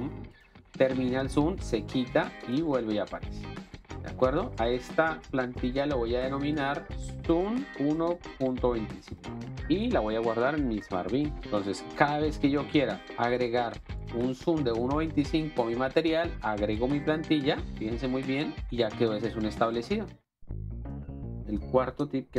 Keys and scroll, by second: 4.0 space, 7.0-9.0 typing, 9.6 Return, 12.1 ctrl+x, 18.6 alt+space.